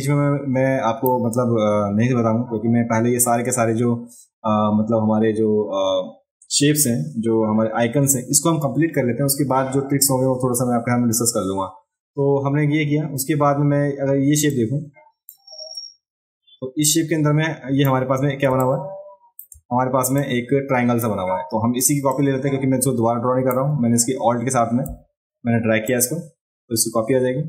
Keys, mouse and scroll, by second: 14.5 click, 16.9-17.9 drag, 18.5 space, 18.6 click, 20.2 click, 22.1-23.5 drag, 25.9-27.4 alt+drag.